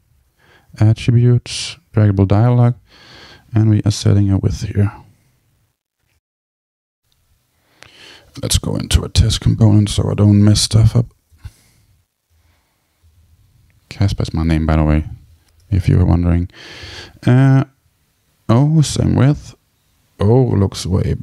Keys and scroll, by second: 4.2 super+v, 9.9 super+k, 15.0 Return.